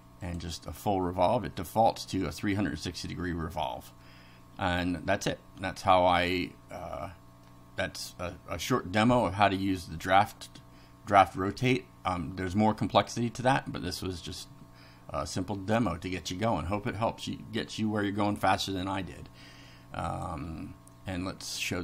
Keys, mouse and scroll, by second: 0.3 click, 1.5 middle click, 3.5 middle click, 5.7 click, 6.8 middle click, 11.1 middle click, 20.1 click, 21.6 click.